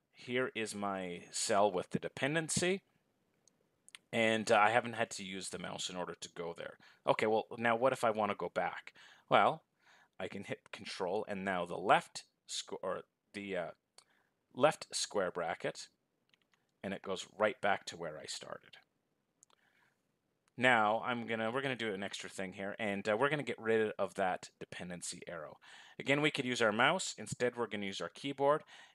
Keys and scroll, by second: 9.8 ctrl+[.